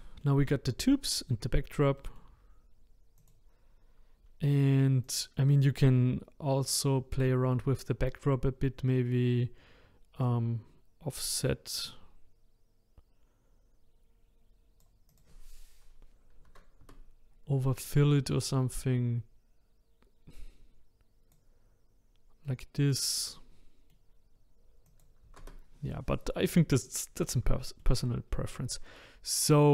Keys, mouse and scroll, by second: 3.2 click, 5.0 click, 10.2-13.3 drag, 15.1-18.1 drag, 18.7-21.7 drag, 22.5-24.8 middle drag, 24.8-26.8 drag, 27.6-29.7 shift+middle drag.